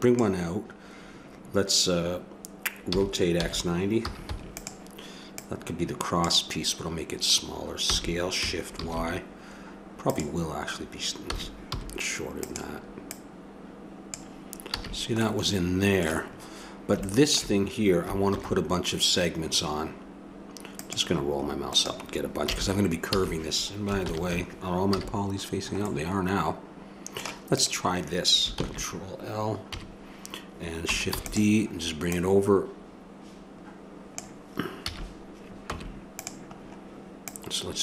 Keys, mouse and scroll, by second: 2.9 r, 5.3-7.1 drag, 7.8 s, 11.4 s, 13.0-14.8 drag, 14.8 a, 15.2-16.4 middle drag, 17.2 middle click, 18.3 ctrl+r, 22.4 a, 23.1 a, 24.0 ctrl+n, 24.9 a, 27.5 right click, 28.1 click, 28.6 ctrl+l, 29.7 KP_3, 31.2 shift+d, 32.1 click, 34.9 a, 35.7 Tab, 37.3-37.8 drag.